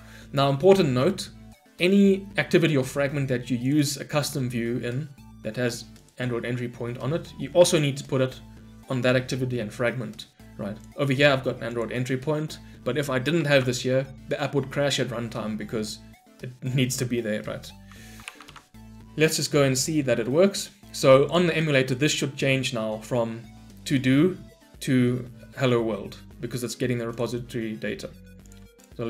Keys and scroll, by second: 13.4 ctrl+/, 17.6 ctrl+/, 18.4 ctrl+/, 27.2 shift+F10.